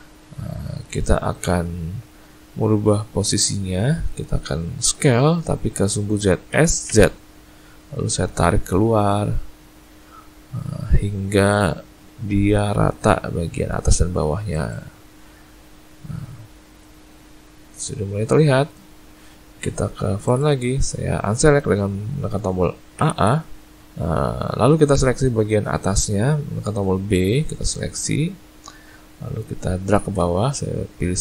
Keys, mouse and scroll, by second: 0.6 scroll up 2, 0.8 shift+middle click, 6.5 s, 15.6-16.8 scroll down 3, 16.8 middle click, 19.6 `, 23.0 a, 23.2 a, 23.8 b, 30.0 shift+space.